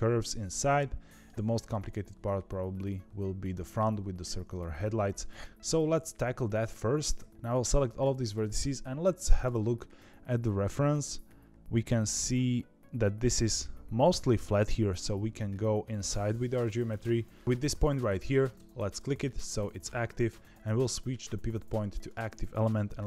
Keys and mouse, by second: 0.6 shift+middle click, 7.5-18.5 drag, 20.4-22.0 drag.